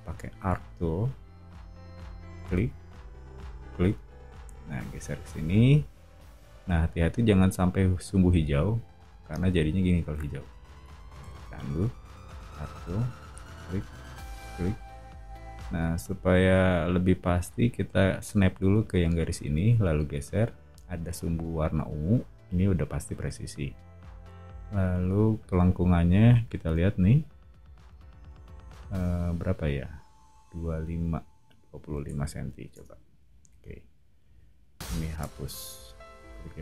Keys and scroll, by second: 0.4 a, 9.0 o, 11.3 super+z, 12.0 a, 31.6-33.5 typing, 32.7 Return, 35.2 BackSpace.